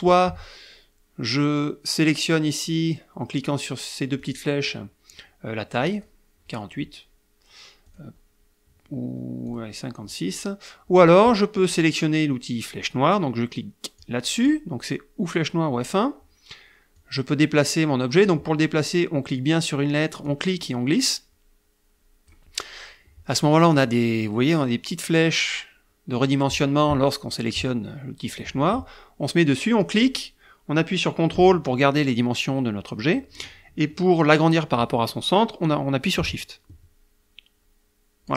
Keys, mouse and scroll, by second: 4.4 click, 6.2 click, 8.2 click, 9.7 click, 14.2 click, 17.2-18.7 drag, 20.5-22.7 drag, 30.0-38.3 drag.